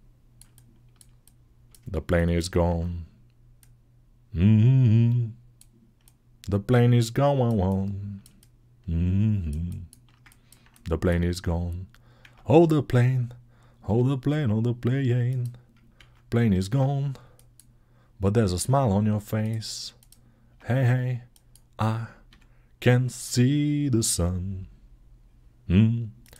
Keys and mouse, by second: 4.9-7.3 right drag, 7.3-9.2 alt+shift+middle drag, 9.2-15.2 alt+shift+drag, 12.1 Tab, 13.7 s, 15.2-17.3 middle drag, 16.3 ctrl+z, 16.5 Tab, 17.3-19.3 drag, 19.3 middle click, 19.8 click, 19.9-21.1 middle drag, 20.3 Tab, 21.1-26.1 drag, 22.1 s, 26.1-26.3 middle drag.